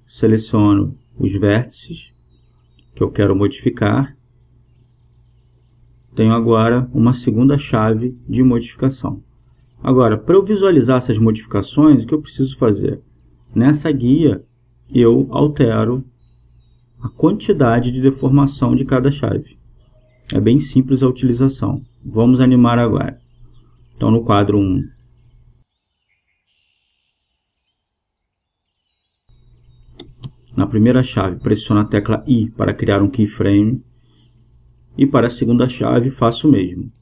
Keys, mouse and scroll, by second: 0.0-4.6 drag, 3.3-4.3 right drag, 4.3-6.3 middle drag, 4.8-7.6 right drag, 6.3-8.2 drag, 7.3-9.5 middle drag, 10.6 KP_0, 13.3 Tab, 14.8-17.8 drag, 18.7-21.9 drag, 22.1-24.5 drag, 27.1-29.0 drag, 30.8-32.7 drag, 34.0 i, 36.1-37.0 drag.